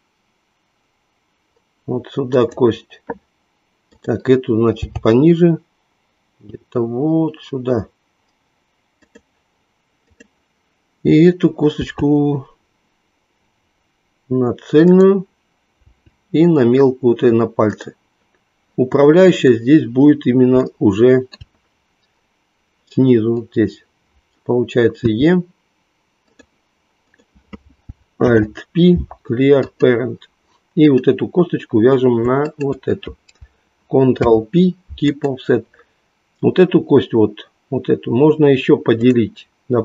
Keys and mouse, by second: 4.9 g, 10.0 click, 11.9 e, 15.9 e, 17.9 click, 20.7 shift+middle click, 25.6 e, 26.3 click, 27.1 click, 28.1 alt+p, 30.9 click, 34.2 ctrl+p.